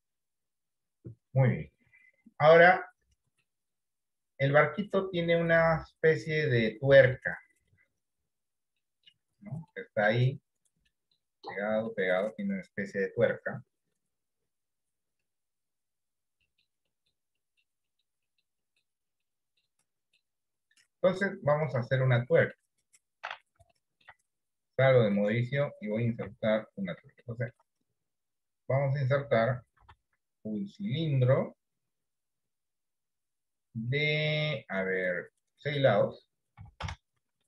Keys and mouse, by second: 3.8 middle click, 4.4 click, 6.8 middle click, 8.9 middle click, 9.8 middle click, 10.9 middle click, 11.8 middle click, 16.6 middle click, 17.0 middle click, 17.6 middle click, 18.0 middle click, 18.4 middle click, 18.8 middle click, 19.1 middle click, 19.6 middle click, 19.9 middle click, 21.8 middle click, 23.8 shift+middle click, 24.8 middle click, 25.6 click, 26.6 KP_7, 27.4 shift+middle click, 29.8 shift+a, 35.6-37.4 drag.